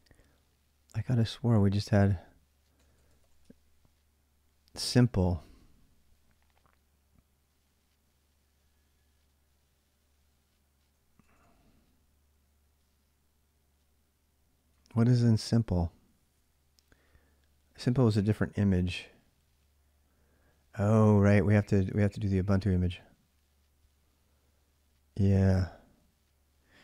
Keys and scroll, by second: 0.7 typing, 2.3-3.6 typing, 11.0 ctrl+a, 11.2 ctrl+a, 14.7 ctrl+a.